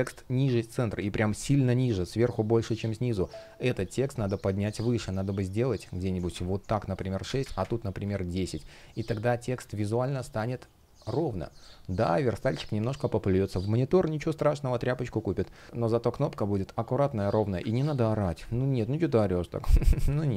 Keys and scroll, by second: 15.8 space.